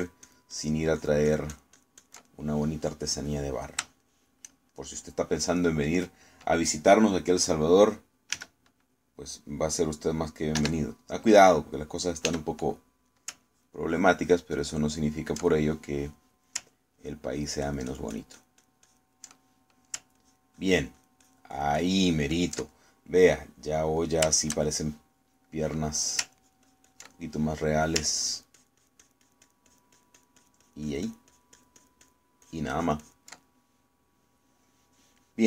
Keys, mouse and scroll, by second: 1.0 ctrl+click, 2.1-3.3 ctrl+drag, 3.3-4.5 ctrl+middle drag, 4.5 middle click, 5.8 shift+middle click, 6.9 middle click, 9.4 s, 11.7 3, 13.3 f, 14.0 click, 14.5 ctrl+click, 15.0 ctrl+click, 16.0 ctrl+click, 16.5-17.7 ctrl+middle drag, 18.0 ctrl+click, 18.4-19.9 ctrl+drag, 20.3 ctrl+middle click, 21.3 ctrl+click, 22.0-23.7 ctrl+drag, 23.8 ctrl+middle click, 24.5 middle click, 25.1-27.3 shift+middle drag, 27.4 ctrl+click, 28.2 ctrl+middle click, 29.3-33.3 ctrl+drag, 33.5 ctrl+click, 34.5-35.4 ctrl+middle drag.